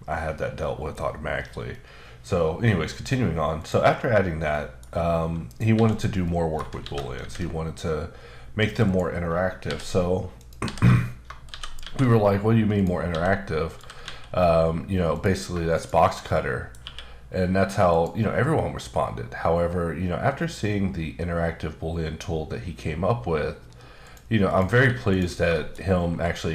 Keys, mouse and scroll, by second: 1.7 middle click, 3.6 click, 4.5 middle click, 5.4 click, 5.7 x, 5.9 click, 6.2 middle click, 6.8 shift+c, 7.3 a, 8.8 click, 9.6 h, 10.3 click, 10.6 h, 11.5 shift+c, 12.0 a, 12.7 click, 13.1-14.0 typing, 13.7 click, 15.1 click, 15.7 shift+click, 16.2 middle click, 16.8 q, 17.9 click, 18.7-20.1 scroll down 3, 20.1 scroll up 3, 20.7-22.3 scroll up 3, 22.3-23.4 scroll up 1, 23.4-24.0 scroll up 2, 24.0 click, 24.5 click, 25.1 click, 25.5 shift+middle click, 25.7-26.5 scroll up 2.